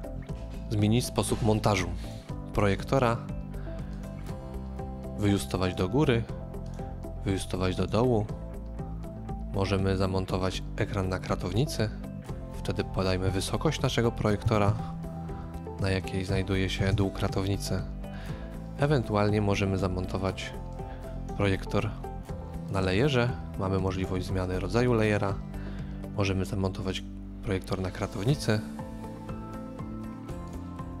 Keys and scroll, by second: 14.2-14.9 typing, 16.5-17.3 typing.